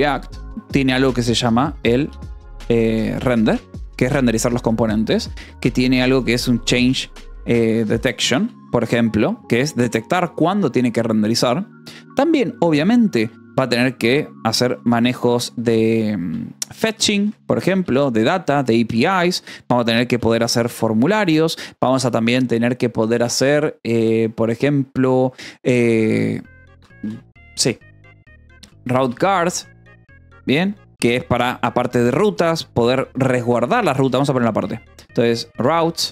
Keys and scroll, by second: 2.0-9.9 typing, 14.4 h, 14.7 t, 14.9 BackSpace, 16.7-19.1 typing, 20.3 o, 20.6 m, 21.0 Return, 21.8 -, 21.9 space, 25.9-31.5 typing, 32.9-36.1 typing.